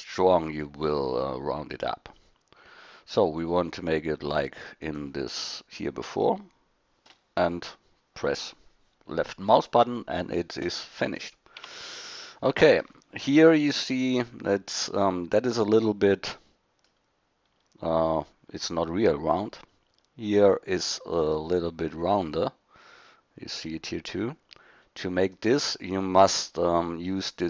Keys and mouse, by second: 11.6 Tab, 15.9 middle drag, 16.5 middle click, 16.7 middle click, 24.8 middle click.